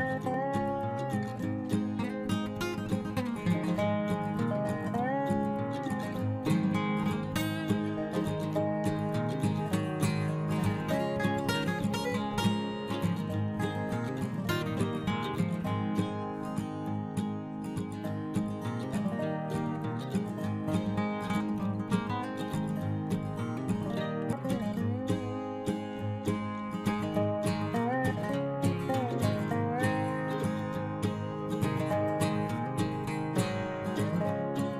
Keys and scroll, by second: 30.2 ctrl+t.